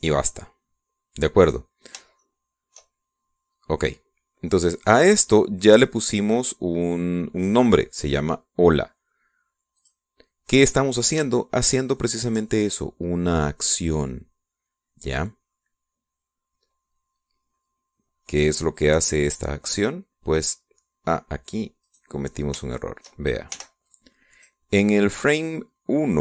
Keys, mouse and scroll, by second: 3.0 shift+click, 4.0 shift+scroll down 1, 10.6 click, 11.6-11.9 scroll down 2, 12.2-13.3 shift+drag, 20.1 click, 22.7 right click, 24.4 b, 24.7 click.